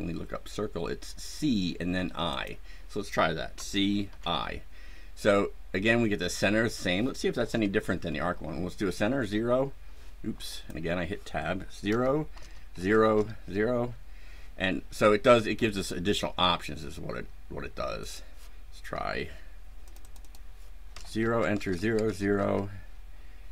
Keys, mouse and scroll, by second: 2.2 click, 3.5 c, 4.0 i, 7.4 KP_0, 8.9 Tab, 10.4 click, 11.8 Return, 12.3 KP_0, 12.7 Return, 13.0 KP_0, 18.0 click, 19.8 click, 20.8 KP_0, 21.1 Return, 21.4 KP_0, 21.6 KP_Enter, 21.9 KP_0, 22.3 KP_Enter.